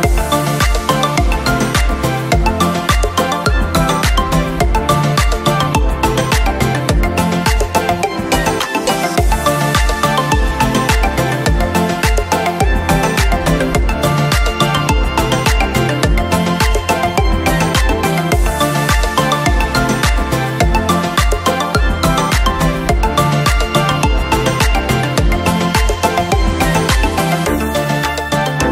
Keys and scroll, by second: 24.8 ctrl+q, 27.5 ctrl+', 28.6 ctrl+".